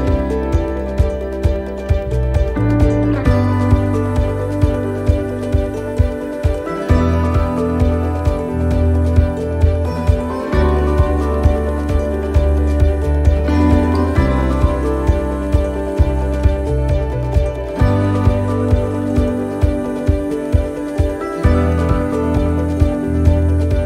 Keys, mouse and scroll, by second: 1.0 right click, 4.4 click, 5.8-6.6 scroll up 4, 6.6 shift+middle click, 7.0-7.7 scroll down 4, 7.9 shift+middle click, 9.0 right click, 10.4 right click, 11.4 l, 13.2 l, 14.2 l, 14.9 l, 15.4 l, 16.3 l, 18.1 l, 19.8 l, 23.2 ctrl+z.